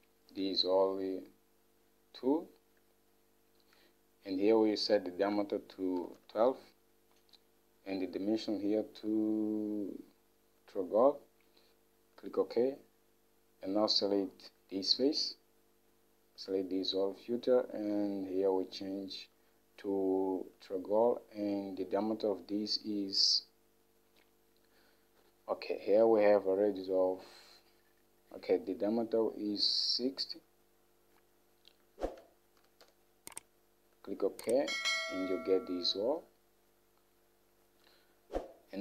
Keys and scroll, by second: 5.9-6.8 typing, 9.0 typing, 32.6-33.5 typing.